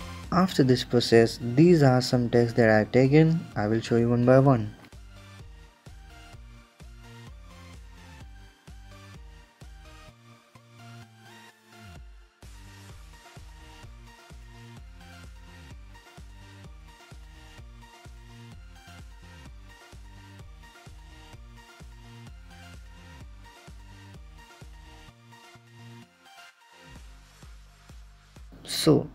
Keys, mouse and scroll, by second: 0.3-2.3 drag, 2.8 click, 3.1 ctrl+KP_0, 3.8-5.8 drag, 6.5 click, 6.8 ctrl+KP_0, 7.4-9.5 drag, 9.6 click, 9.9 ctrl+KP_0, 10.7-12.7 drag, 12.9 click, 13.3 ctrl+KP_0, 14.1-16.1 drag, 16.1 click, 16.5 ctrl+KP_0, 17.2 right click, 18.1-20.2 drag, 20.5 click, 20.9 ctrl+KP_0, 21.7-22.9 drag, 22.9 KP_0, 23.3-23.8 middle drag, 23.8 click, 24.9 KP_5, 25.6-27.6 drag, 27.6 middle click, 28.3 space.